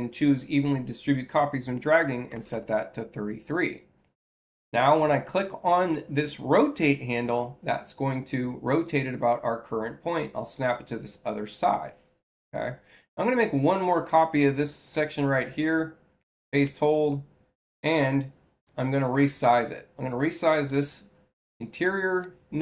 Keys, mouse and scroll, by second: 2.2 3, 2.4 3, 3.5 click, 6.7-10.4 drag, 13.7 click, 14.8 c, 16.5 shift+c, 18.5 click, 20.6-22.1 drag.